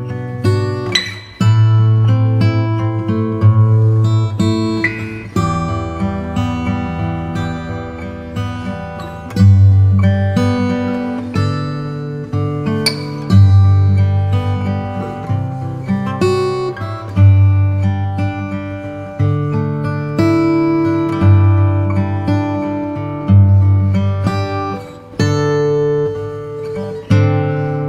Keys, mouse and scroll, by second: 0.7 ctrl+s, 0.7 ctrl+s, 14.0 shift+t, 14.7 u, 15.6 BackSpace, 17.4 t, 17.9 i, 18.5 Return, 20.5-22.0 typing, 20.9 ctrl+super+middle click, 22.4 Return, 24.1 Tab, 24.4 middle click, 25.1 Tab, 25.1 click, 25.2 Tab, 25.6-27.8 middle drag, 26.0 shift+a.